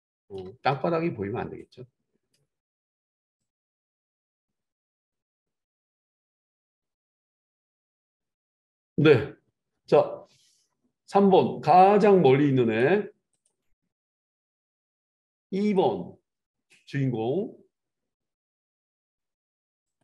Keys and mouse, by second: 13.5-14.8 middle drag, 14.8-20.0 drag.